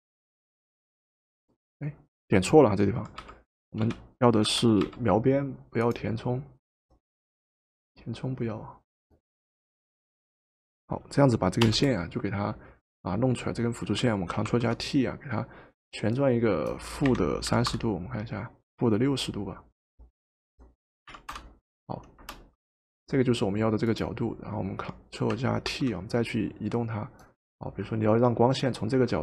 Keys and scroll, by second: 3.2-4.9 typing, 11.6 Return, 14.5 ctrl+t, 16.9-18.2 typing, 20.9-22.2 typing, 25.7 ctrl+t.